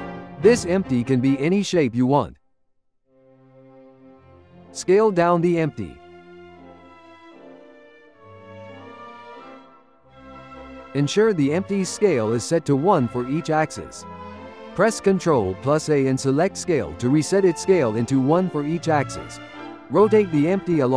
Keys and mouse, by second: 3.5-4.6 ctrl+middle drag, 4.6 s, 5.5-6.3 ctrl+middle drag, 6.3 s, 7.7 F2, 10.8 click, 11.6 click, 12.1 n, 13.3-14.4 shift+middle drag, 15.4 ctrl+a, 16.9 ctrl+a, 19.5-20.9 drag.